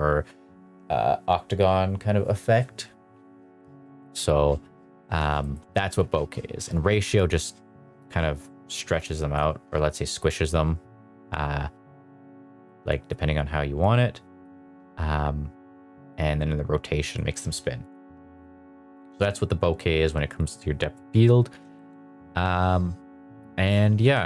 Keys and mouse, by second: 4.0 shift+middle drag, 5.4 shift+middle click, 6.6 click, 8.8 click, 13.0-14.5 drag, 16.1-17.1 drag, 17.8 click, 21.7 shift+middle drag, 24.1 s.